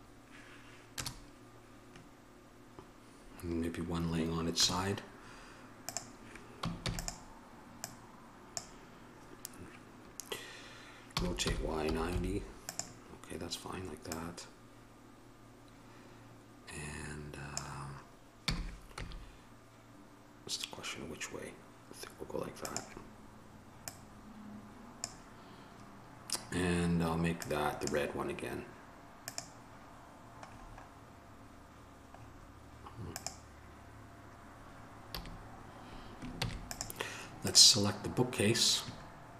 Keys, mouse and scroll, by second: 1.2 KP_0, 6.1 right click, 7.0 shift+d, 8.1-10.3 drag, 24.1-27.8 drag, 35.4 a, 36.6 ctrl+s.